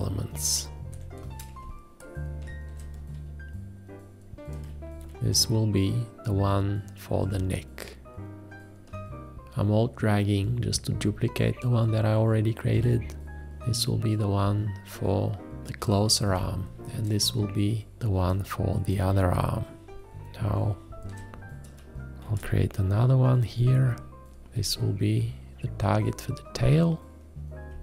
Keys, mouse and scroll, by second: 0.9 7, 1.7 ctrl+space, 2.7 space, 4.6 click, 12.7 click, 19.4 space, 22.3 shift+`, 24.5 `.